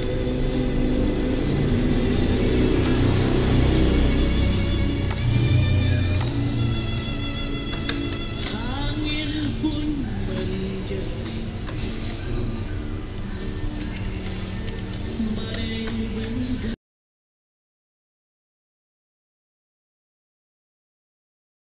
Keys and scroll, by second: 13.4 f, 18.9 Escape.